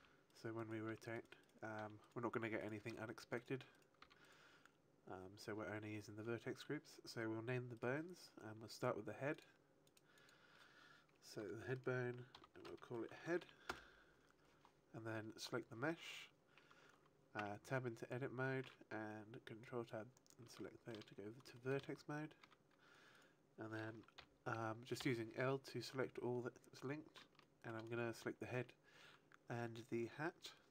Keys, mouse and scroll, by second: 0.3 right click, 0.5 right click, 1.2 right click, 1.7 r, 2.0 right click, 2.5 right click, 2.8 r, 3.3 right click, 3.6 right click, 3.9 r, 4.2 right click, 7.7 right click, 9.2 click, 11.6 click, 15.3 right click, 18.5 Tab, 20.5 shift+middle click, 21.0-22.0 scroll up 4, 21.5 shift+middle click, 22.3 a, 23.1 right click, 24.1 l, 25.0 l, 27.3 shift+middle click.